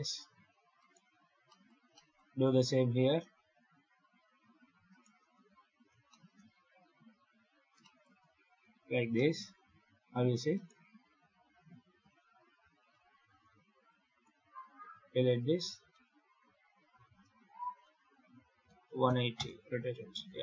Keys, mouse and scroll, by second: 0.7 right click, 1.4 shift+middle click, 1.8 shift+middle click, 4.8 shift+right click, 5.2 f, 6.0 shift+middle click, 6.2-7.0 scroll down 6, 7.0 Tab, 7.7 shift+middle click, 8.1 a, 8.8 scroll up 2, 9.0 middle click, 10.4 right click, 11.1 KP_7, 11.6 scroll down 6, 11.9 Tab, 12.5 6, 13.1 alt+a, 13.8 click, 14.8 x, 15.3 Tab, 15.8 4, 17.5 shift+d, 20.1 alt+a.